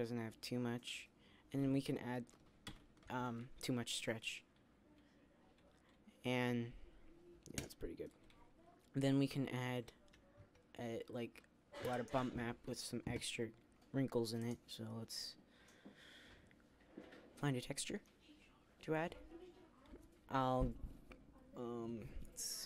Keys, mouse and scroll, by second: 9.1-10.4 drag, 10.4 Tab.